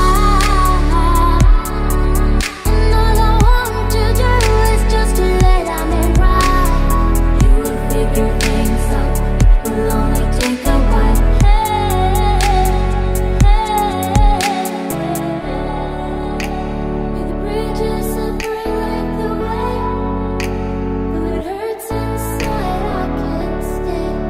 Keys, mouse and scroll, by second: 0.0-7.3 typing, 0.0 Tab, 0.3 Tab, 8.6-14.6 typing, 13.6 Tab, 13.9 Tab, 14.5 Tab, 15.6 Tab, 16.8 space, 17.2 a, 17.3 Tab, 17.7 Tab, 17.9 Tab, 18.2 Tab, 19.2 Tab, 19.4 Tab, 19.6-20.0 typing, 20.0 Tab, 21.1 middle click, 21.6 middle click, 22.1 click, 22.3 middle click, 22.7 click, 23.6 click.